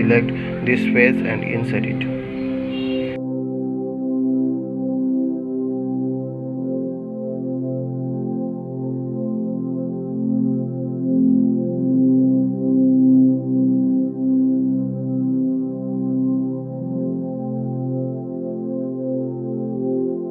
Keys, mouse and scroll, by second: 0.9 3, 1.5 click, 2.1 middle click, 4.8-6.3 middle drag, 6.4 ctrl+z, 12.4 middle click, 13.0-13.5 scroll up 2, 14.9 g, 17.7 click, 18.2-20.3 middle drag.